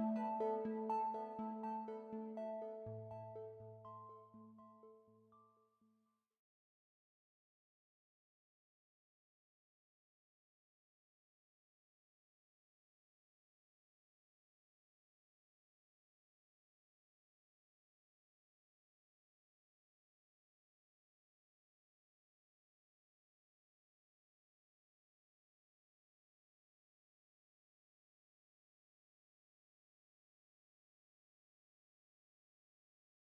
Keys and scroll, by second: 4.9 ctrl+shift+a, 9.0 space, 9.9 a, 13.0 space, 15.6 space, 19.2 `, 19.8 space, 25.5 space, 26.9 ctrl+shift+a, 31.1 ctrl+shift+a, 31.2 space.